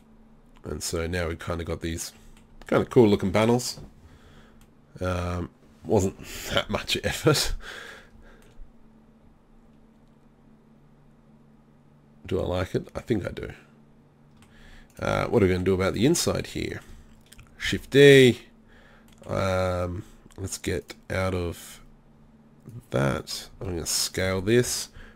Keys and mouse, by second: 3.6-6.1 middle drag, 8.6-9.2 middle drag, 14.9 right drag, 15.2 Tab, 17.7 shift+d, 23.5 s.